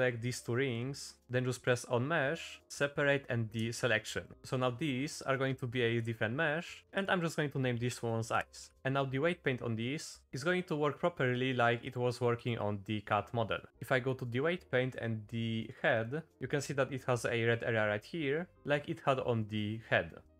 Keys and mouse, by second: 0.8 shift+middle click, 1.6-3.8 drag, 4.3 Tab, 5.1 middle click, 5.4 shift+middle drag, 6.8 click, 6.9-8.7 drag, 11.8 click, 12.4 click.